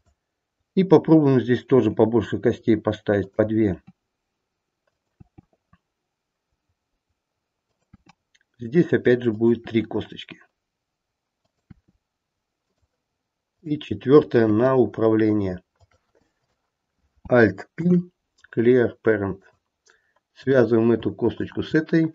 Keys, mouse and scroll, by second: 1.8 e, 3.7 e, 9.5 e, 13.4 click, 14.5 e, 16.3 click, 17.7 alt+p, 20.3 click, 21.4 shift+click.